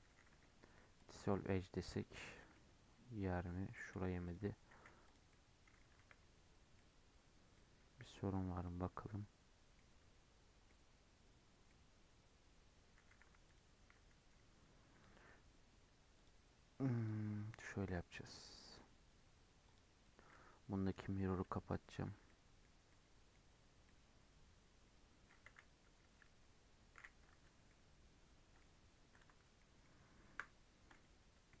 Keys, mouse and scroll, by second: 0.0-1.5 right drag, 1.5 middle click, 2.2 alt+z, 2.5-4.2 middle drag, 4.2 alt+click, 4.7 x, 5.2 middle click, 5.9 1, 6.1-6.7 scroll up 3, 6.7 middle click, 7.5-8.1 scroll down 3, 8.1 middle click, 8.3 scroll up 3, 8.6-9.9 middle drag, 9.9 scroll up 2, 10.6-11.9 middle drag, 11.9-12.2 scroll up 1, 13.0 2, 13.4 alt+click, 14.6-16.1 scroll down 3, 16.1 click, 16.9 click, 18.1-19.6 middle drag, 19.6 click, 20.8-21.3 drag, 21.3 middle click, 22.0 Tab, 22.2-23.5 middle drag, 23.5 Tab, 23.8-25.4 middle drag, 25.4 a, 27.2 Tab, 27.6-29.0 middle drag, 29.0 KP_Decimal, 29.5-30.2 middle drag, 30.2 KP_7, 30.7-31.6 scroll up 10.